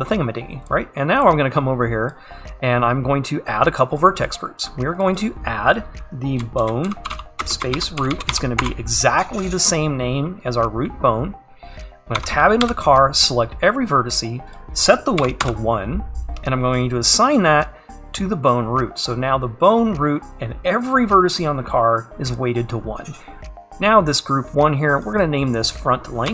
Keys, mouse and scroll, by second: 4.0-8.7 drag, 8.7 e, 17.7-22.4 drag, 24.2-26.3 drag.